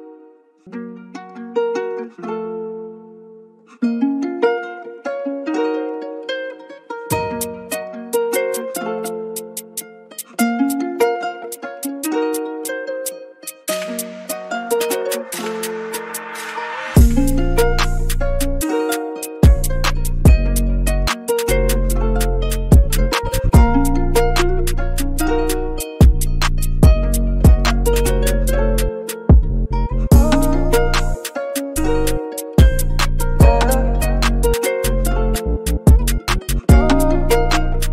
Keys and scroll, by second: 3.9 typing, 34.3 v, 35.8 super+g, 36.1-37.2 typing.